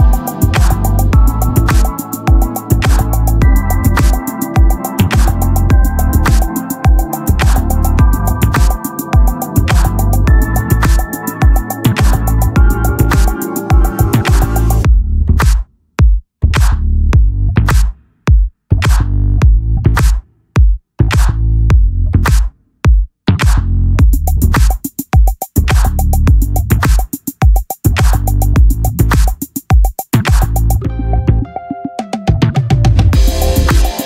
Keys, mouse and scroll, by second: 0.4-3.6 drag, 1.4 ctrl+z, 3.7 click, 4.2-6.2 middle drag, 6.7-8.0 drag, 8.5 middle click, 8.9 Tab, 9.4 a, 10.2 a, 11.7 click, 16.2 middle click, 17.1 Tab, 18.1 Tab, 18.6 a, 18.9 a, 20.3 click, 20.5 ctrl+z, 21.5 x, 25.4-26.7 middle drag, 28.7 Tab, 28.7 click, 30.7-32.0 drag, 33.5-34.0 drag.